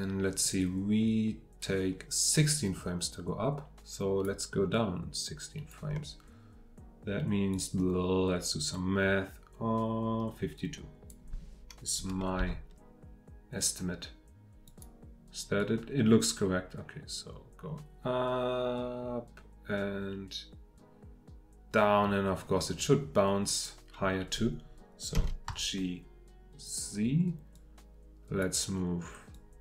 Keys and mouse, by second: 12.4 g, 25.1 g, 25.5 z, 26.6-28.6 drag.